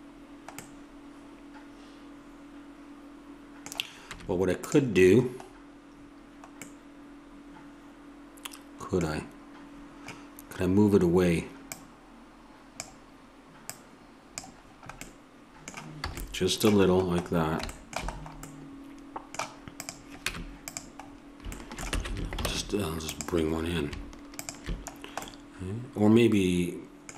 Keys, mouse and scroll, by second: 2.4-4.1 middle drag, 4.1 Tab, 11.6-15.1 drag, 15.1 middle click, 16.1 a, 19.7 click, 20.3 Tab, 22.5 ctrl+Tab, 24.9-26.3 drag.